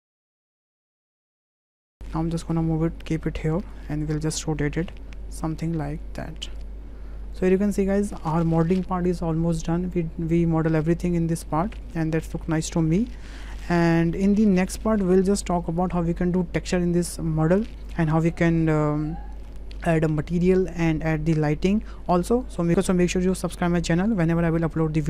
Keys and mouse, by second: 0.2 shift+click, 0.6 g, 0.8 click, 1.3 click, 1.6 s, 1.7 click, 1.8 middle drag, 2.0 ctrl+j, 2.5-3.8 drag, 4.4 r, 7.4 click, 7.6-8.0 drag, 11.0-11.4 drag, 11.7 shift+click, 11.9-12.4 drag, 12.7 shift+click, 13.1-13.6 drag, 13.9 shift+click, 14.5 click, 15.1 middle drag, 15.5 shift+drag.